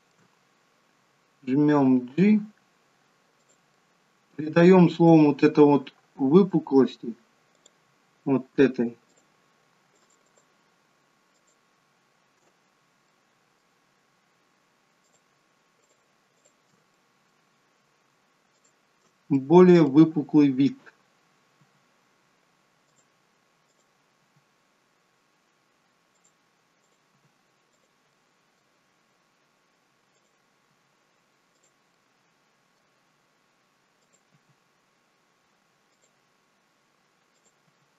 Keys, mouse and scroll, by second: 2.1 g, 3.8 middle click, 5.0 middle click, 5.9-7.5 scroll up 1, 7.5 click, 9.2 shift+click, 10.0 alt+shift+click, 13.0 scroll up 1, 13.1 middle click, 15.1 shift+click, 15.8 shift+click, 16.4 shift+click, 17.0 middle click, 18.5 shift+click, 19.4 middle click, 21.6 g, 23.8 click, 24.2 g, 26.9 click, 27.3 g, 28.1 middle click, 30.2 click, 30.7 g, 32.0 middle click, 34.0 click, 34.4 g, 37.1 g, 37.5 click, 37.7 g.